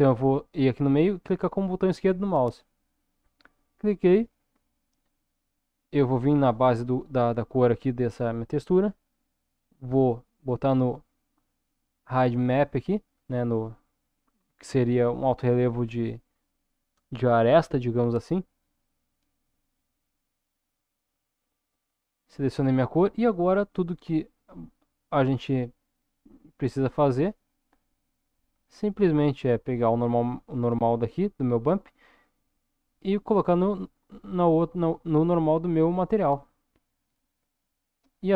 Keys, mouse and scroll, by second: 4.1-5.0 drag, 7.4-20.3 drag, 23.6 middle click, 24.8 middle click, 26.1-27.3 drag, 27.8 middle click, 31.7-36.7 drag.